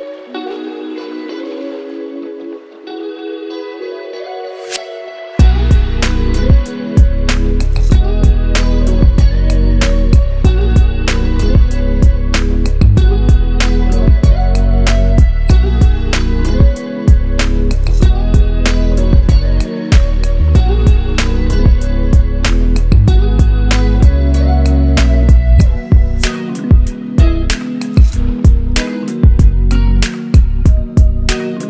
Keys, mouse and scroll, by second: 4.3 scroll down 1, 9.0 click, 10.5-11.9 shift+drag, 13.1 c, 13.4 click, 14.1 Down, 14.4 click, 16.1-16.5 drag, 19.8-20.1 click, 20.6 ctrl+v, 22.1 ctrl+c, 22.3 click, 22.9 ctrl+v, 23.8-25.7 drag, 26.4 ctrl+c, 27.4 click, 28.1 ctrl+v, 29.1-30.0 drag, 30.7 ctrl+c, 31.3 click.